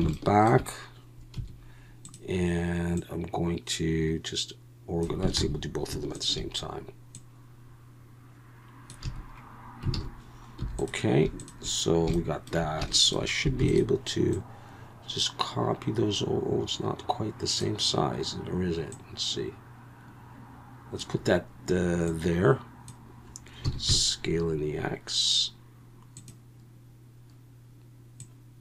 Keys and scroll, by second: 1.4 2, 5.4 ctrl+z, 9.0 a, 10.0 alt+a, 10.6 3, 13.6 shift+d, 23.6 s, 23.9 x.